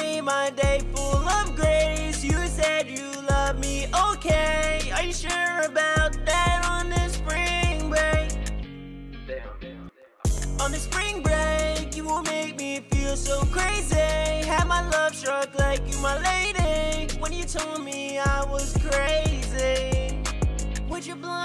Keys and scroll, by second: 11.7 ctrl+super+w, 15.1 ctrl+super+w.